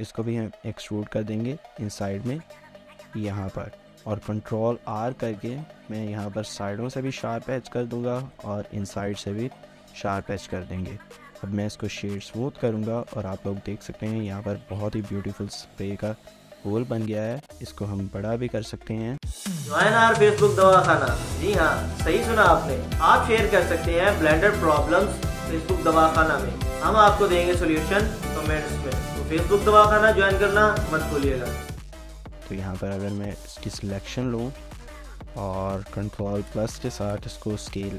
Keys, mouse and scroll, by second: 3.3 e, 3.7 |, 4.1 ctrl+r, 7.9 ctrl+r, 10.4 Tab, 10.6 scroll down 1, 11.0 middle click, 11.8 right click, 12.7 scroll down 1, 13.6 shift+middle click, 14.7 scroll down 1, 14.9 shift+middle click, 17.0 scroll up 1, 17.4 shift+middle click, 17.7 scroll up 1, 18.0 shift+middle click, 19.0 middle click, 31.7 1, 32.5 Tab, 32.7 scroll up 1, 32.8 1, 33.0 shift+middle click, 33.4 scroll up 1, 34.0 1, 34.8 alt+click.